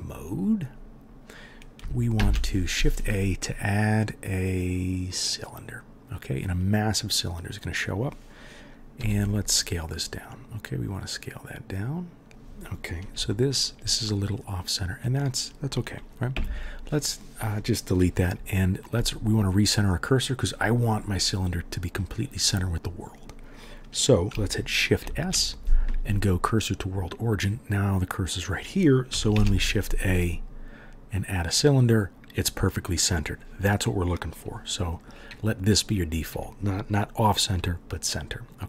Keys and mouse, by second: 2.1 shift+a, 5.2-10.0 drag, 5.2-10.0 middle drag, 5.2-10.0 right drag, 9.0 s, 10.1 click, 10.1 middle click, 10.1 right click, 10.3-38.6 drag, 10.3-12.3 middle drag, 10.3-12.3 right drag, 16.3 Delete, 25.0 shift+s, 29.3 shift+a.